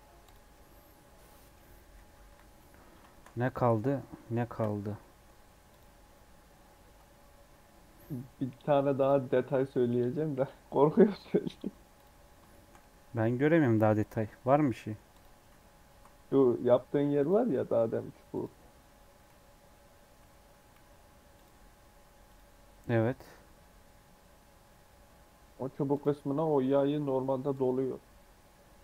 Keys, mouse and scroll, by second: 0.2 click, 0.5-2.2 middle drag, 2.2 KP_7, 3.0 shift+middle click, 3.3 scroll up 2, 3.7 middle click, 4.1 shift+scroll up 1, 4.3 shift+middle click, 4.6 scroll up 1, 4.9 middle click, 5.6 click, 5.9 Tab, 6.1-6.5 scroll up 4, 7.9 middle click, 8.6 Tab, 8.9 click, 9.1 scroll down 4, 9.4-11.5 middle drag, 11.5 scroll down 1, 11.9 click, 12.4-14.0 shift+middle drag, 14.0-14.5 scroll up 1, 14.5 middle click, 15.0 click, 15.4 z, 17.1 click, 17.4 middle click, 18.2 click, 18.8-19.2 scroll up 1, 19.2 z, 20.7 q, 25.8-28.8 drag.